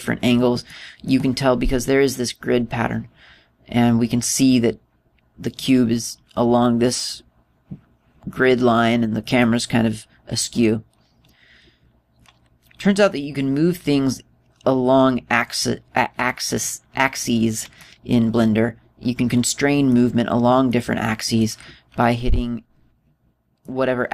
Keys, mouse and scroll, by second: 1.2 middle click, 6.2 right click, 9.9 right click, 18.4 middle click, 19.0 middle click, 21.3 middle click.